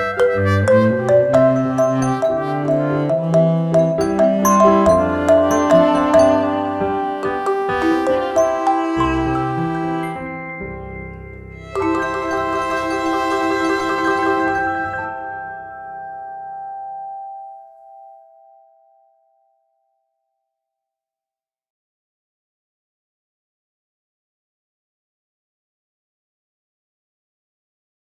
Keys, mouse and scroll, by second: 0.5-0.9 alt+scroll down 1, 1.2-6.4 drag, 6.4-12.2 drag, 15.0 right click, 16.2 click, 17.0-25.5 drag.